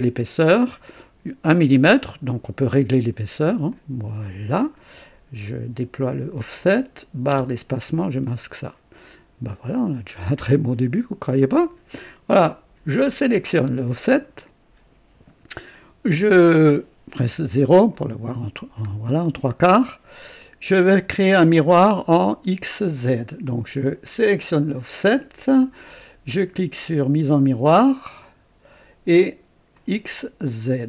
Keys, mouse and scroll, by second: 3.6 click, 5.4 click, 6.6 click, 7.3 space, 8.2-12.1 drag, 13.0 click, 17.3 KP_0, 17.9 right click, 19.1 scroll down 1, 20.4 click, 24.4 click, 28.2 click, 29.7 click, 30.6 click.